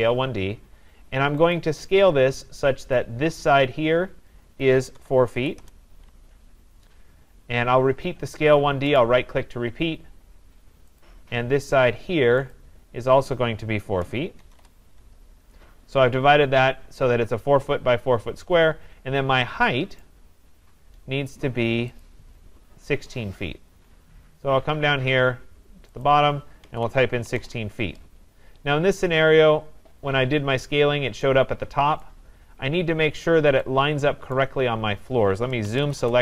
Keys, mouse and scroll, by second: 1.5 click, 3.0 click, 4.7-5.8 typing, 7.0 scroll, 9.0 right click, 10.7 scroll, 11.0 click, 12.5 click, 14.1-14.4 typing, 14.6 Return, 15.8-16.2 scroll, 16.5 scroll, 16.7 scroll down 2, 18.5-19.6 scroll down 2, 20.0 right click, 20.5 scroll down 2, 21.2 scroll, 22.0 click, 22.5-24.1 scroll, 24.6 scroll, 26.1 click, 26.5-28.7 typing, 27.7 scroll down 10, 28.3 scroll down 1, 28.4 scroll, 29.4 scroll, 30.0-30.9 scroll, 32.1 right click, 32.3-33.0 scroll, 34.1 scroll down 12, 34.4 right click, 34.7 scroll, 35.7 z, 35.8 Return, 35.9 s, 36.0 Return.